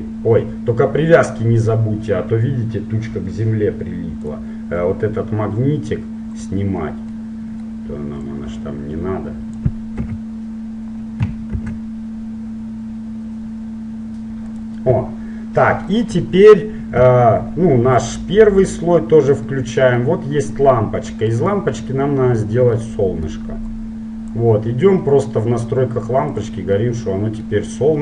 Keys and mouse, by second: 6.4-8.4 drag, 7.2-9.0 middle drag, 8.6-10.3 drag, 10.3 KP_7, 11.7 shift+d, 15.8-18.8 middle drag, 18.8-20.8 drag, 19.7-20.7 middle drag, 20.7-23.4 right drag, 22.9 click, 23.4 middle click, 23.8-25.8 drag, 26.5-28.0 drag, 27.0-28.0 middle drag.